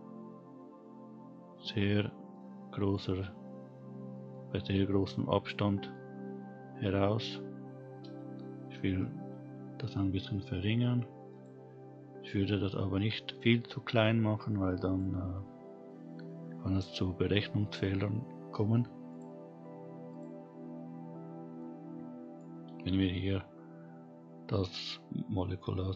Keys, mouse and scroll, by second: 2.3-2.9 middle drag, 3.2 scroll down 1, 3.5-4.1 scroll up 1, 4.1 middle click, 5.1-5.7 scroll up 2, 5.7 middle click, 6.7-8.2 scroll down 1, 8.2-8.7 scroll down 3, 10.2 s, 12.2-13.2 scroll up 2, 14.9 click, 19.1 click, 20.1 click, 20.6-21.6 scroll down 5, 21.6-22.4 middle drag, 23.5-24.3 scroll up 2, 24.6-25.9 middle drag.